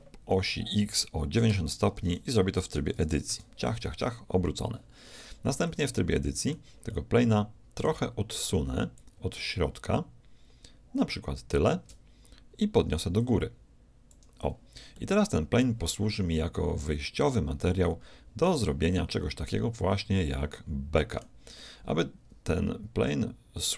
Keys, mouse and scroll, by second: 1.5 Tab, 1.9 r, 5.0-8.8 middle drag, 8.9-10.9 drag, 13.1-15.1 drag, 14.9-17.8 middle drag, 18.9-20.7 middle drag, 21.5-23.1 middle drag, 23.3 middle click.